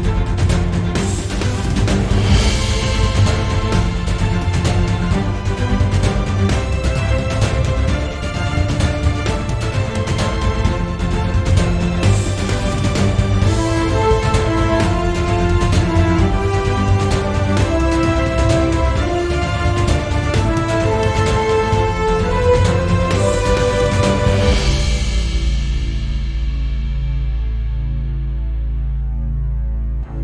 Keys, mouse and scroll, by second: 3.4 right click, 4.0 shift+click, 5.3 z, 5.7 click, 6.7 g, 10.4 right click, 10.9 click, 12.3 g, 17.7 click, 17.9-18.2 scroll up 1, 18.6-19.7 shift+middle drag, 19.1-19.6 scroll down 1, 19.7 click, 20.5 scroll down 1, 20.8 shift+click, 21.2-21.6 scroll up 2, 22.1 middle click, 22.1 g, 22.8 right click, 24.1 g, 24.6 Escape, 24.8 scroll down 1, 25.1 c, 25.6 right click, 26.5 click, 27.3 c, 28.6 right click, 28.9 c.